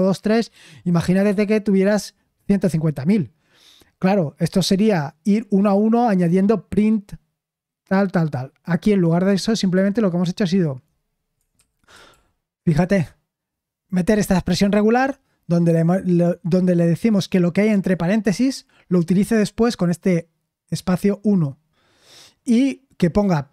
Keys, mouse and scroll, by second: 12.1 ctrl+p, 17.7-23.5 drag.